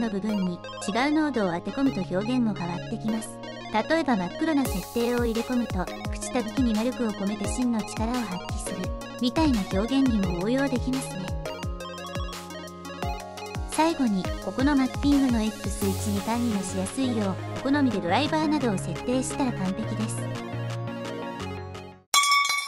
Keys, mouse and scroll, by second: 3.6 click, 3.9 shift+a, 7.0 click, 11.0-13.2 drag, 13.4-18.0 right drag, 19.4 g, 21.2 g.